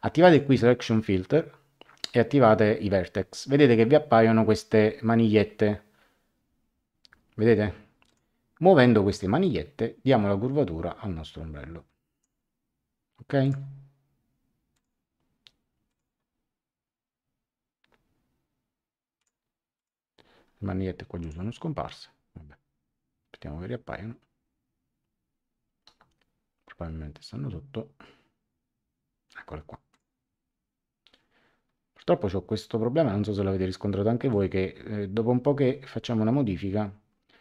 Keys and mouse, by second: 0.2 click, 8.0 click, 9.4 click, 13.4 click, 14.7 click, 15.8 click, 19.1 click, 21.2 click, 29.9 click, 34.3 click.